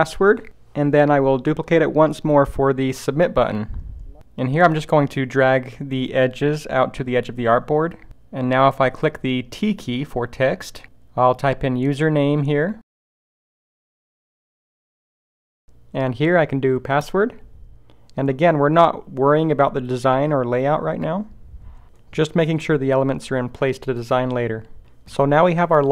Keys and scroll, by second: 9.9 t.